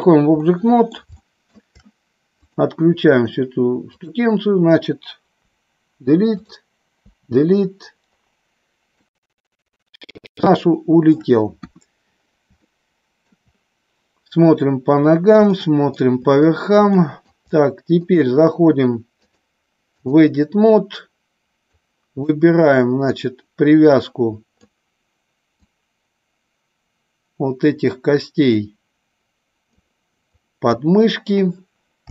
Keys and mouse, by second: 0.4 middle click, 1.1 shift+middle click, 5.4 Delete, 6.4 click, 7.0 Delete, 9.1-10.3 middle drag, 10.4-11.1 shift+middle drag, 11.6 KP_1, 12.5-13.3 shift+middle drag, 15.5-15.9 shift+middle drag, 17.0 shift+middle click, 19.1-20.1 drag, 21.8 click, 23.1-24.6 drag, 25.5-29.7 drag, 30.3 click, 32.0 g.